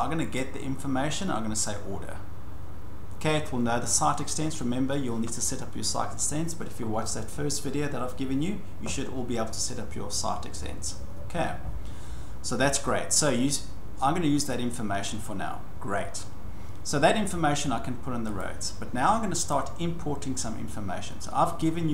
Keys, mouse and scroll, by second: 0.3 click, 1.6 click, 14.5 click, 18.4 click, 19.5 click.